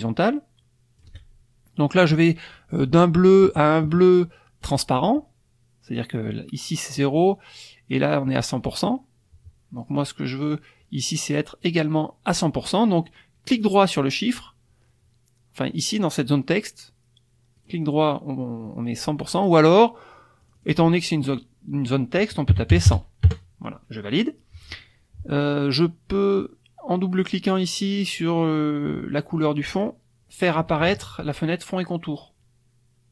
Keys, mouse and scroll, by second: 2.0 click, 4.6 click, 7.9 click, 10.4 click, 11.6 right click, 12.3 click, 13.6 right click, 15.7 click, 17.6 right click, 19.2 click, 20.4 click, 22.5 KP_1, 22.7 KP_0, 23.2 KP_Enter, 29.6 click.